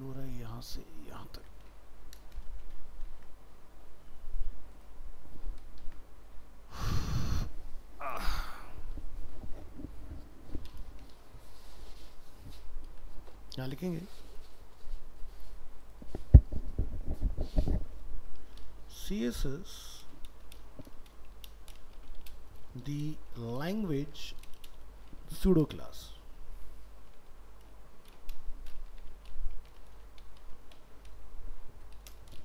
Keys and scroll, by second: 1.4 ctrl+c, 2.8 ctrl+v, 5.8 ctrl+Home, 12.9 ctrl+End.